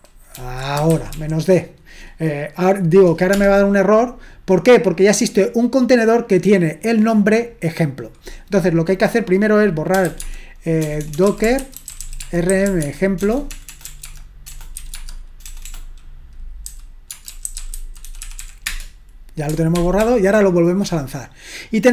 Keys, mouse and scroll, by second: 3.3 Return, 9.8-18.9 typing, 19.8 ctrl+p, 20.0 ctrl+p.